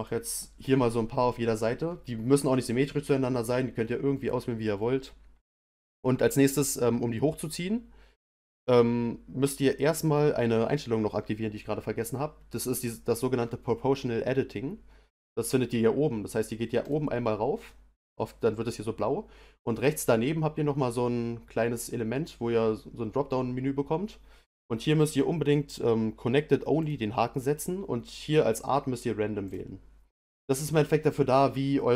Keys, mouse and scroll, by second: 16.8 click, 19.8-22.8 drag.